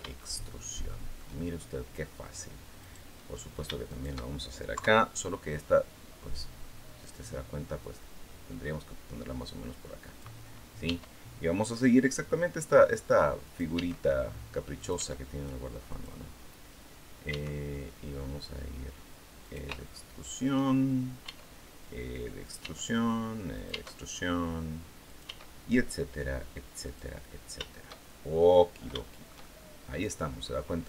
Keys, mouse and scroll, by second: 0.0-1.1 shift+middle drag, 2.6 right click, 3.0 middle click, 3.7 shift+right click, 4.5 KP_3, 7.6-10.2 drag, 10.7 e, 13.3 click, 13.5 e, 14.6 click, 14.7 e, 15.7 click, 17.1 e, 19.3 shift+click, 19.6 shift+middle click, 21.1 e, 22.3 click, 22.4 e, 23.4 click, 23.5 e, 24.9 click, 25.1 e, 26.7 click, 27.1 scroll down 1, 27.4 shift+middle click, 28.2-28.6 scroll down 1, 28.7-29.9 shift+right drag.